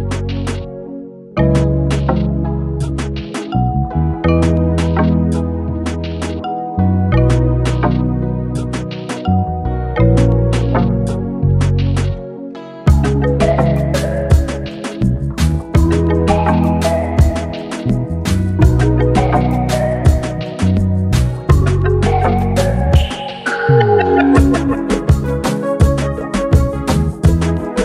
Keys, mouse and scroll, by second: 2.4-4.0 drag, 7.4 click, 10.6 click, 10.6-11.6 typing, 13.8 typing, 15.6 click, 15.6 typing, 21.5 click, 21.5 typing, 22.8 click, 27.5 click, 27.5 typing.